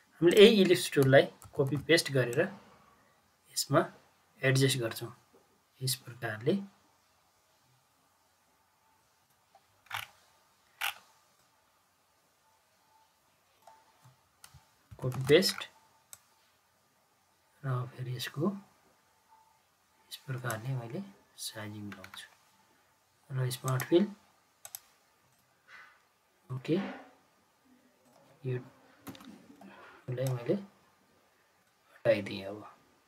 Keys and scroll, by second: 1.4 ctrl+c, 1.6 ctrl+v, 14.8 ctrl+c, 15.0 ctrl+v, 29.0 Delete.